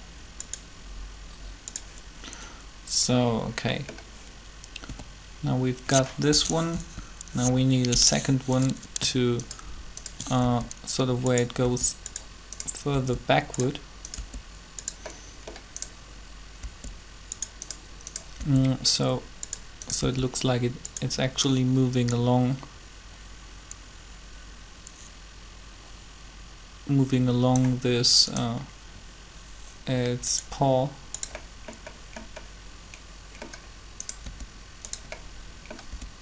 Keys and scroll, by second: 4.7 a, 6.7 Up, 10.4 shift+r, 11.6 r, 16.6 r, 18.4 r, 20.0 r, 34.2 r, 35.9 r.